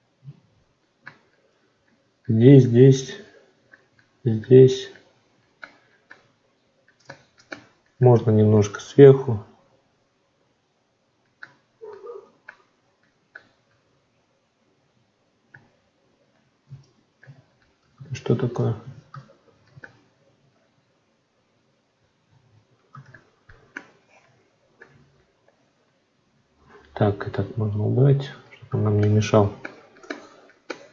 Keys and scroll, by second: 16.5 ctrl+z, 18.7 ctrl+z.